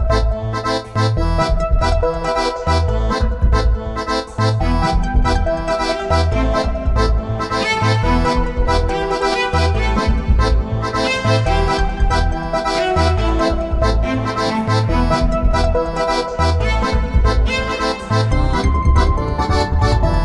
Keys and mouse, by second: 3.1 r, 5.1 z, 6.3 KP_0, 9.5 right click, 11.7-13.6 drag, 13.0-15.2 middle drag, 15.3-17.7 drag, 17.1 middle click, 18.0 middle click, 18.1 z, 18.4-20.2 middle drag.